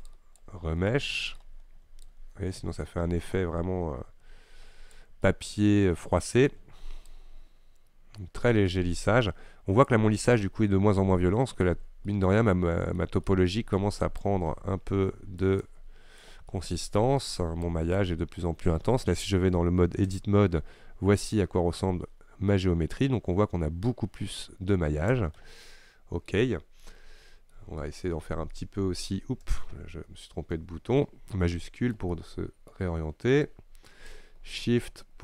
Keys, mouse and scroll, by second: 1.0-2.1 shift+middle drag, 2.1-5.3 shift+drag, 5.3-7.1 middle drag, 7.1-12.2 shift+drag, 12.2-14.3 middle drag, 14.3-16.6 shift+drag, 16.6-17.7 middle drag, 17.7-20.4 shift+drag, 20.4 Tab, 22.2-23.1 scroll up 6, 24.2-25.1 scroll down 5, 25.3 Tab, 25.7 middle click, 26.6-27.0 scroll down 1, 27.0-28.5 middle drag, 28.5-29.1 Tab, 29.6 Tab, 29.8 Tab, 30.3 Tab, 30.7 Tab, 31.6-34.2 shift+middle drag, 34.2-35.2 shift+drag.